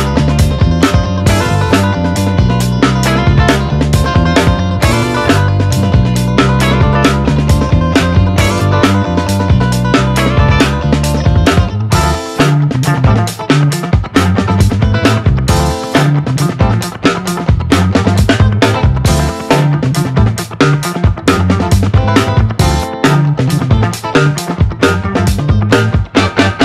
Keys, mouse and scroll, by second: 4.1 ctrl+click, 5.6-7.1 typing, 7.3 Return, 10.1 click, 12.5-17.2 alt+drag, 17.2-17.5 scroll up 1, 19.3-24.9 drag, 24.9 right click, 26.5 click.